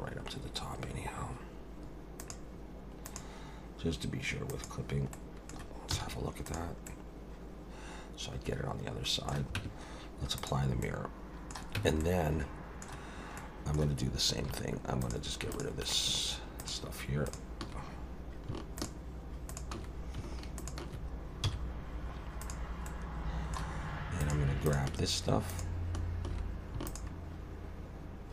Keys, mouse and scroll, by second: 2.2 click, 3.1 click, 4.5 click, 5.1 middle click, 5.9 z, 6.9 middle click, 9.6 Tab, 10.5 click, 10.8 middle click, 11.8 Tab, 12.0 middle click, 13.4 middle click, 14.5 3, 15.0 click, 15.5 shift+click, 16.6 click, 17.3 click, 18.8 shift+click, 19.5 shift+click, 20.6 shift+click, 21.4 x, 22.9 middle click, 24.2 click, 24.7 shift+click, 25.5 click, 26.9 click.